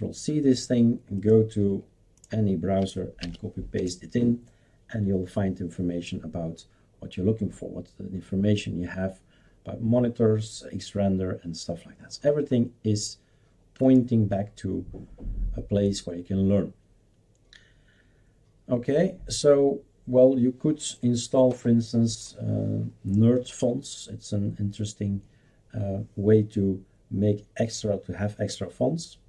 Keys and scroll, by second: 3.2 ctrl+v, 3.8 Return.